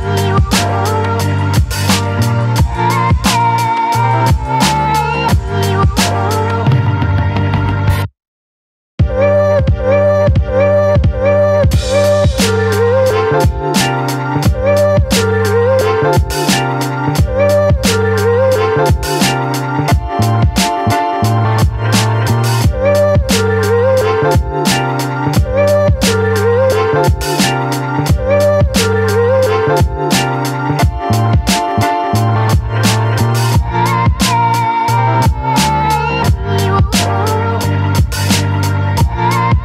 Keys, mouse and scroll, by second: 1.3-4.1 alt+drag, 4.4 space, 4.7-6.3 alt+drag, 6.3-11.9 ctrl+drag, 11.9 m, 12.6-15.3 drag, 15.3 ctrl+c, 16.3-19.4 drag, 20.1 ctrl+v, 20.5 ctrl+t, 21.3-27.5 drag, 27.5-31.0 alt+drag, 31.5 space, 31.9-34.9 ctrl+drag, 34.9 v, 35.7 click, 36.6 ctrl+t, 37.8-39.6 alt+drag.